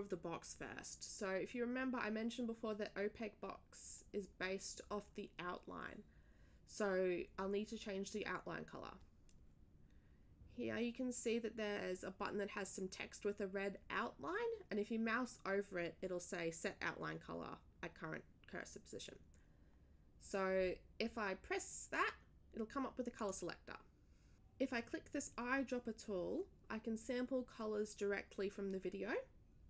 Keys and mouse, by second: 23.1 click.